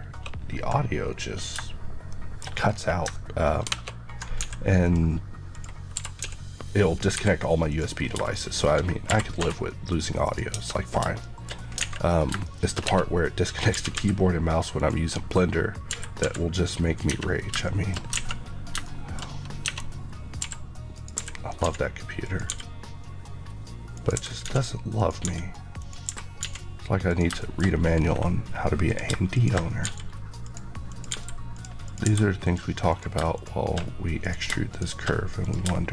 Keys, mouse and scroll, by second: 2.0 middle click, 3.0-4.1 ctrl+scroll up 1, 4.2 scroll up 1, 4.3 x, 4.7 click, 5.5 click, 5.9 e, 7.0 typing, 7.6 click, 7.9 scroll, 8.0 scroll down 1, 8.3 middle click, 9.0 e, 10.1 click, 10.5 Tab, 11.1 middle click, 11.5-12.4 scroll down 2, 11.7 alt+a, 12.4 middle click, 12.8 Tab, 13.7 typing, 14.7 click, 15.8 typing, 16.9 click, 17.0 Tab, 17.3 scroll down 1, 18.2-18.8 scroll down 1, 18.8 middle click, 19.3 scroll up 1, 19.6 Tab, 20.3-21.5 typing, 20.9 click, 22.2 click, 27.3 middle click, 27.6 scroll up 1, 28.8 click, 31.1 g, 31.5 click, 32.0 g, 35.0 g, 35.3 click.